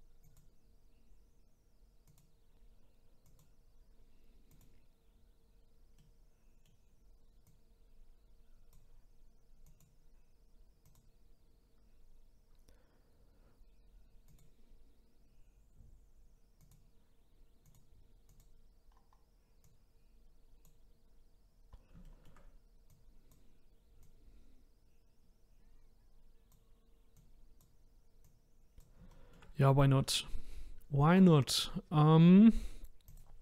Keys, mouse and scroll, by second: 0.3 click, 2.1 click, 3.3 click, 4.5 click, 6.0-7.5 middle drag, 7.5 click, 9.6 click, 10.8 click, 14.3 click, 16.6 click, 17.6 click, 18.3 click, 18.9-19.6 scroll down 1, 19.6 click, 21.4 scroll up 1, 21.7-22.1 scroll down 1, 22.1-22.9 shift+middle drag, 22.9 click, 24.0 click, 27.2 click, 28.2 click, 29.1-29.5 shift+middle drag, 29.5-30.6 scroll up 4, 33.1 click.